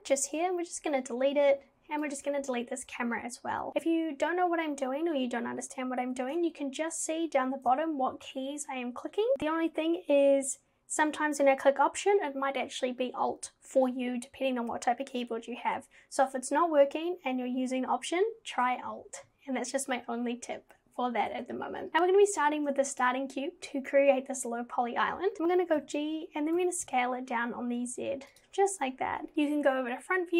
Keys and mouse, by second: 0.8 Delete, 2.2 click, 2.5 Delete, 23.0 click, 25.8 g, 29.3 KP_1.